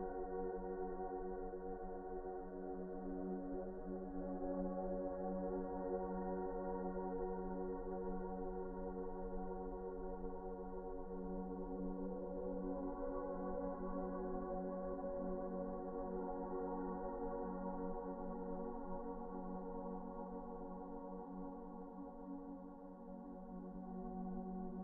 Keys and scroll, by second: 0.5 F4, 10.8 F4, 15.1 Delete, 17.4 f, 23.2 t.